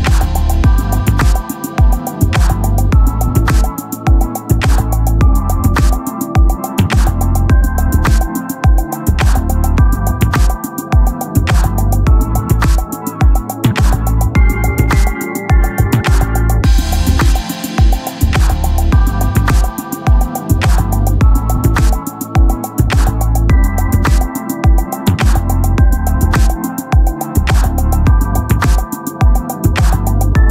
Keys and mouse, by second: 0.6 click, 3.5 click, 7.2 click, 16.2 click, 22.7 click, 27.4 click.